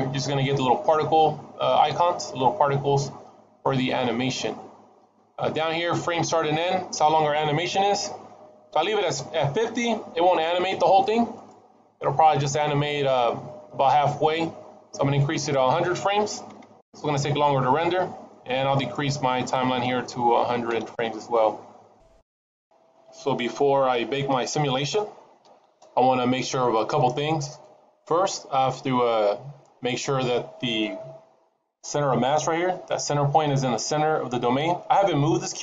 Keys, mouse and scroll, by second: 2.9-7.6 scroll down 19, 12.1 click, 15.2 click, 16.5 KP_0, 18.6 click, 26.8 middle click, 33.7 middle click.